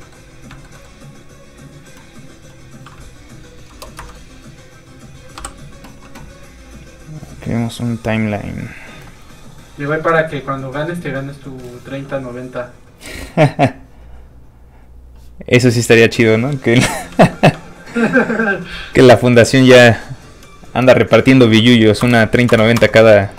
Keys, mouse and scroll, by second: 0.0 shift+middle click, 0.5 shift+middle click, 3.2 click, 3.3 click, 3.6 KP_0, 3.9 Return, 5.3 i, 10.3 click, 15.9 middle click, 17.1 g, 17.8 shift+click, 19.3 click, 21.5 shift+KP_2, 22.0 KP_0, 22.7 Return.